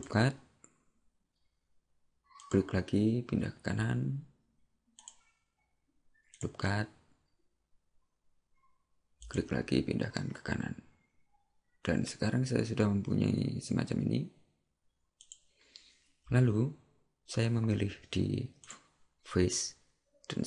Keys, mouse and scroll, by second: 6.4 click, 18.7 click.